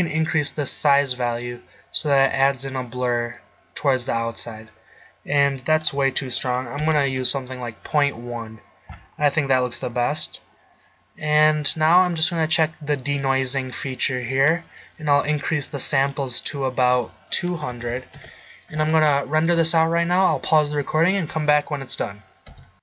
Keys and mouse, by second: 0.0 click, 0.3 middle click, 5.8-7.3 drag, 18.0 0.